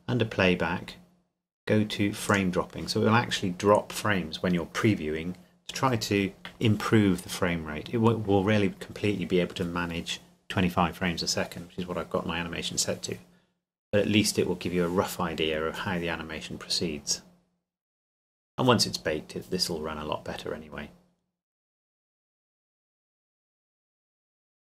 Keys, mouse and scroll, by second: 2.3 click, 7.8 click.